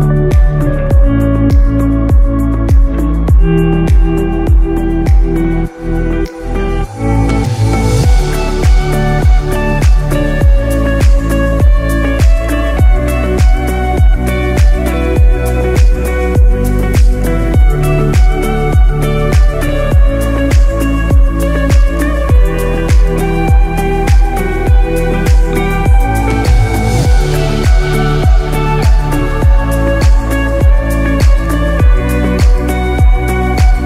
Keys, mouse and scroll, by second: 0.9 Tab, 1.2 right click, 2.1 middle click, 5.2 click, 7.0 Tab, 7.7-8.0 scroll up 2, 8.0 middle click, 12.0-12.7 scroll down 1, 12.7-13.1 scroll down 1, 13.1 middle click, 14.1-16.9 scroll up 2, 17.4 middle click, 17.9 click, 18.4 i, 26.0 middle click, 27.2 ctrl+z, 29.4 click, 31.7 alt+click, 32.6 middle click.